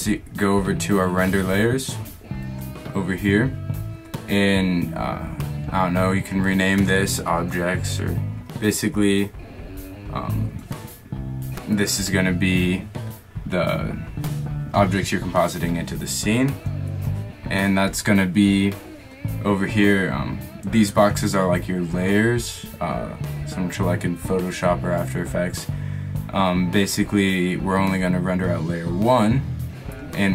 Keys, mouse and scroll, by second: 0.1-0.6 middle drag, 0.8-2.1 drag, 4.9-6.1 middle drag, 8.0-14.7 middle drag, 14.9-17.9 drag, 17.9-20.2 middle drag.